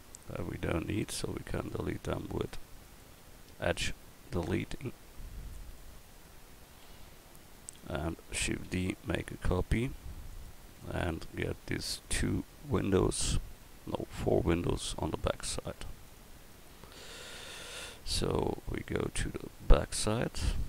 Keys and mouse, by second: 0.8 x, 3.2 x, 4.9 Tab, 7.1 KP_1, 8.7 shift+d, 10.4 right click, 11.8 drag, 17.9-18.2 middle drag, 19.2 middle drag.